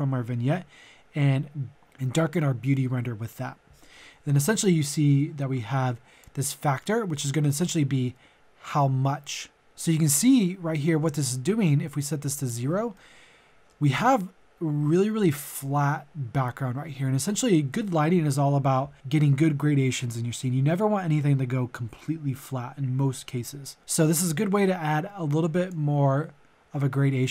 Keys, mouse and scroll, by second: 12.9-14.5 middle drag, 25.7-27.3 drag.